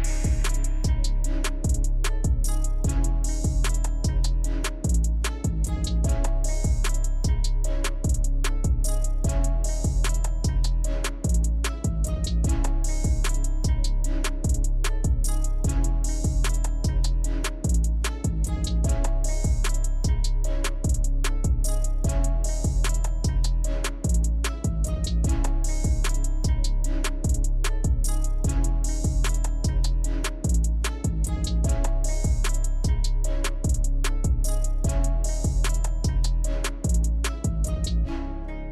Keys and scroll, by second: 23.7 ctrl+-, 23.8 ctrl+-, 37.0 Delete, 37.4 ctrl++, 37.6 ctrl++.